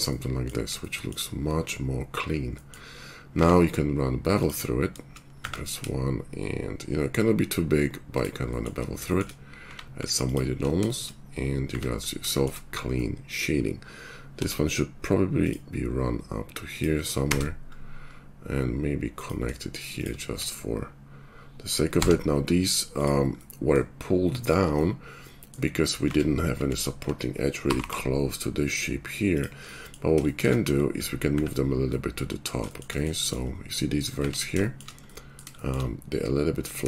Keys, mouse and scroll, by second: 3.3-8.2 middle drag, 3.3 q, 8.2 shift+click, 9.6 q, 11.7 Tab, 12.3 shift+click, 14.3 k, 19.9 shift+middle click, 20.0 shift+click, 26.0 Tab, 27.7 g, 34.1 Tab, 34.5 shift+middle click.